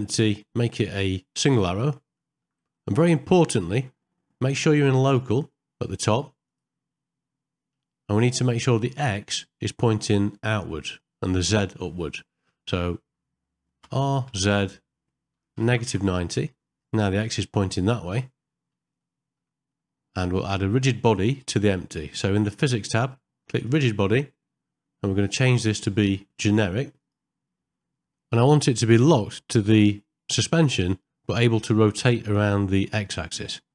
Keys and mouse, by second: 2.2 ctrl+middle click, 2.8 shift+middle click, 3.3 middle click, 5.2-7.2 drag, 7.8 middle click, 19.1 shift+middle click, 19.7 middle click, 25.4-27.1 drag, 27.8 middle click, 28.7 shift+middle click, 32.2 middle click, 33.5 middle click.